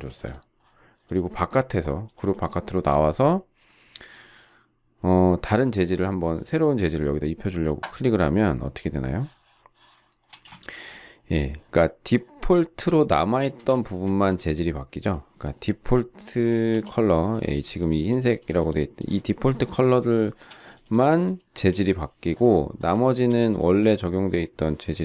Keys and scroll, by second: 0.0 space, 10.3 space, 16.7 p, 17.4 space, 21.5 shift+Delete.